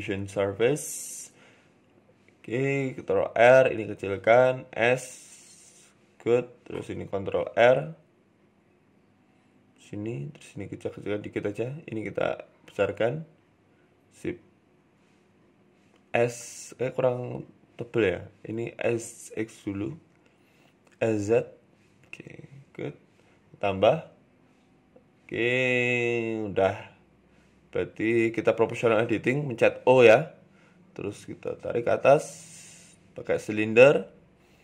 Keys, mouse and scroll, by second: 0.3 ctrl+r, 1.0-1.6 scroll down 2, 1.2 shift+middle click, 2.1 ctrl+r, 2.7 click, 3.1 s, 3.9 click, 4.2 s, 7.1 ctrl+r, 8.0 ctrl+r, 9.1 ctrl+r, 10.0 click, 10.3 s, 11.6 click, 12.1 s, 14.0 Tab, 14.6 middle click, 16.0 Tab, 16.2 middle click, 16.5 scroll up 1, 17.0 ctrl+r, 18.5 s, 21.6 KP_3, 22.8 click, 23.1 middle click, 23.7 Tab, 24.3 Tab, 24.5 middle click, 24.9 KP_3, 24.9 KP_2, 25.6 KP_1, 26.1 KP_3, 26.9 click, 28.3 o, 28.7 g, 31.1 shift+middle click, 31.5 shift+a, 33.4 s, 34.1 s.